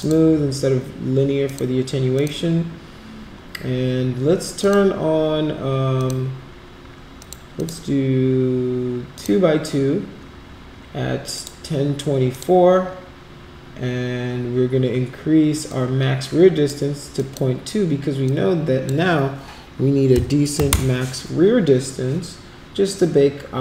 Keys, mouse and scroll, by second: 1.4 click, 2.1 click, 4.6 click, 5.9 click, 7.2 click, 7.5 click, 9.1 click, 11.3 click, 12.3 click, 15.7 click, 17.1 click, 18.2 click.